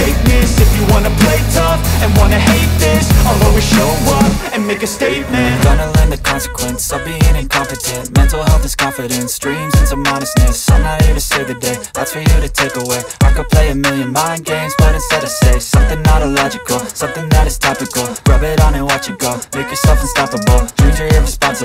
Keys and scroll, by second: 0.9 Escape, 3.5 F2, 12.1 F4, 12.6 Escape, 20.7 F3, 21.1 F2.